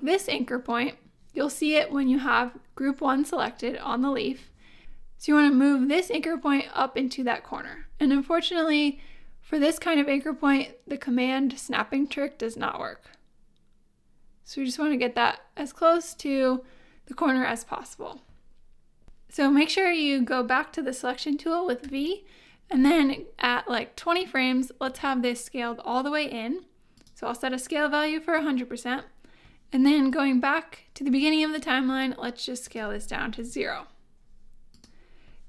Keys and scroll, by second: 19.0 y, 21.8 v, 33.4 0, 33.5 Home.